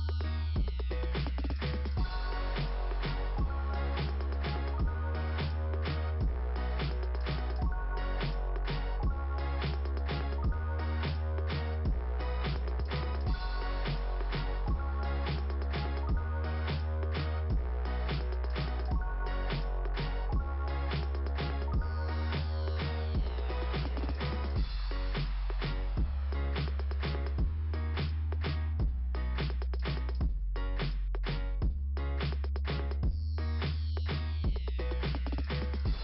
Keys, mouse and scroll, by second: 0.0 click, 0.3 click, 0.7 click, 3.4 click, 3.5 click, 3.6 click, 10.5 click, 10.7 click, 11.0 click, 14.5-15.0 scroll down 2, 15.0 click, 20.7 middle click, 21.0 middle click, 21.2 middle click, 22.5 [, 23.1 [, 26.3 click, 26.7 click, 27.0 click, 27.2 click, 28.3 click, 32.3 x.